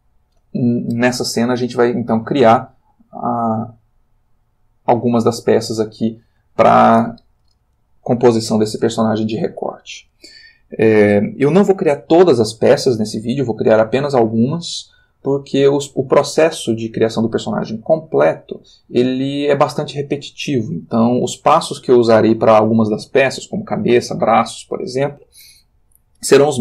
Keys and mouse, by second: 3.0-6.4 drag.